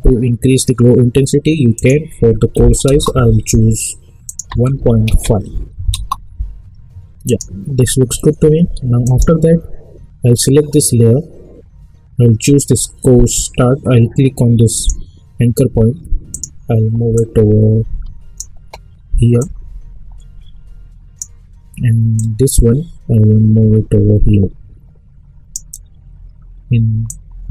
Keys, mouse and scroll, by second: 1.7 click, 2.9 Return, 4.2 click, 5.9 Return, 7.2 click, 12.4 click, 14.7-27.5 drag.